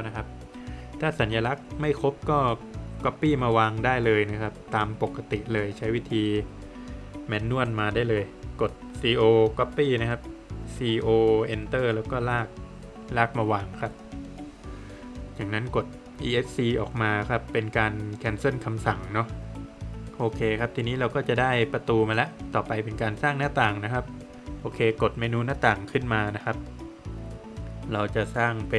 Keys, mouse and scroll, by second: 1.3 scroll up 3, 4.5-5.0 scroll up 2, 10.1 click, 14.3 Escape, 14.8 scroll down 1, 15.5 middle click, 16.1 Escape, 16.7 scroll down 1, 17.5 middle click, 18.0 scroll down 1, 18.6 middle click, 19.2 scroll down 1, 19.4 middle click, 20.7 middle click, 26.1 click, 28.2 click.